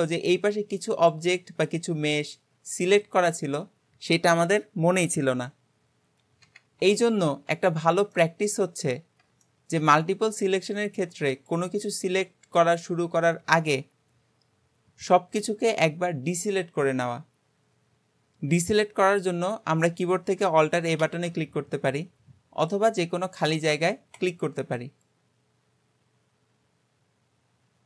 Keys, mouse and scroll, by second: 2.8-6.7 scroll up 1, 7.3 ctrl+z, 8.1-9.1 middle drag, 9.1-9.5 scroll down 2, 9.5 shift+middle click, 10.0-10.5 scroll up 2, 10.5 click, 11.3 shift+click, 12.1 shift+click, 12.6 shift+click, 21.1 alt+a, 24.2 click.